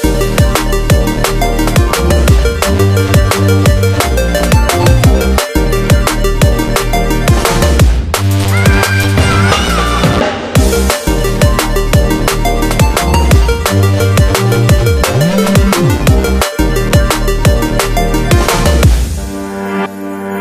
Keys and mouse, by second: 1.2-4.4 ctrl+middle drag, 6.4 click, 7.8 click, 11.1-14.1 middle drag, 16.0 shift+click, 16.7-18.9 middle drag, 18.9 shift+click, 19.6-20.4 middle drag.